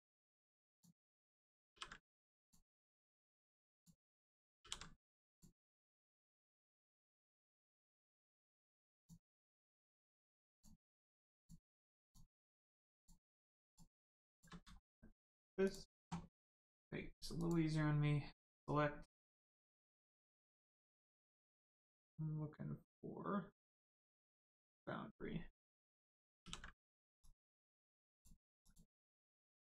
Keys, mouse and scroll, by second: 0.1-0.7 scroll up 1, 0.7 click, 1.1 middle click, 1.7 ctrl+e, 2.3 click, 2.7 middle click, 3.7 click, 5.3 click, 5.8 middle click, 7.0 shift+middle click, 7.3 middle click, 7.4 middle click, 7.8 shift+middle click, 8.1 middle click, 8.2 middle click, 8.9 click, 9.3-9.8 scroll up 1, 10.5 shift+click, 11.3 shift+click, 12.0 shift+click, 12.3 shift+middle click, 12.9 shift+click, 13.6 shift+click, 14.3 shift+click, 14.7 shift+middle click, 15.6 shift+click, 17.3 click, 24.6 click, 26.4 ctrl+e, 27.1 click, 29.3 Tab.